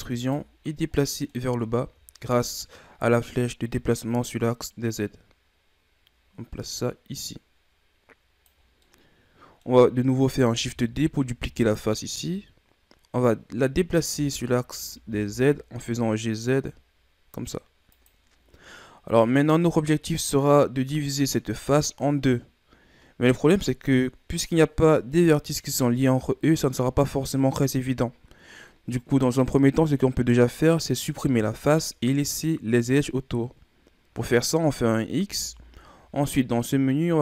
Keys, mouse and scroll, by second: 1.1 middle click, 1.6-2.1 scroll up 4, 2.1 middle click, 2.8-3.1 scroll up 1, 3.7-6.7 drag, 8.8-10.7 middle drag, 10.7 shift+d, 14.1 g, 18.3 scroll down 3, 18.7-21.3 middle drag, 21.3 scroll up 2, 35.2 x.